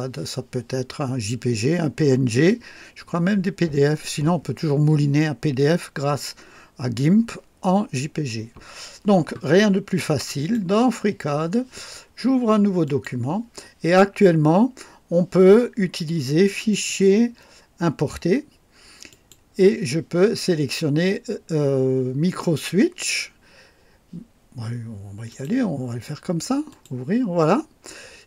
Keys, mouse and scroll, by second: 10.3 click, 12.8 click, 16.7 click, 19.1 click, 25.3 click, 26.7 click.